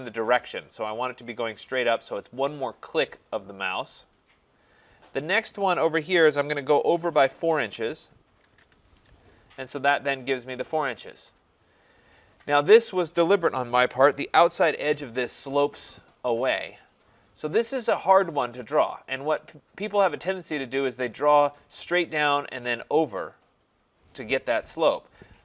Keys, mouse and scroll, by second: 3.1 click, 7.7 4, 8.5 shift+', 8.6 Return, 10.0 click, 11.8 scroll.